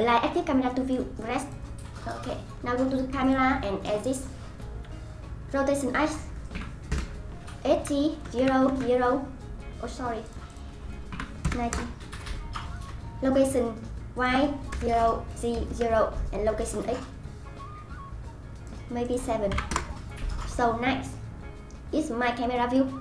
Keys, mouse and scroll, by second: 3.2 click, 5.9-9.5 drag, 10.5-16.6 drag, 17.0-21.5 drag, 21.5-21.8 scroll up 1, 21.8-23.0 scroll down 3.